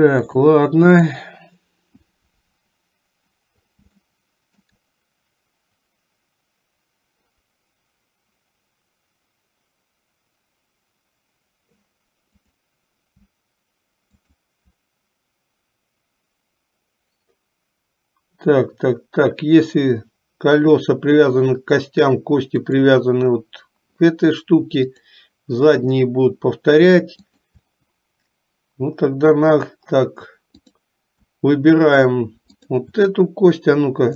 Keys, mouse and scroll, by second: 0.5 click, 4.2 shift+middle click, 14.2 shift+click, 25.0 click, 30.6 click, 32.6 shift+click.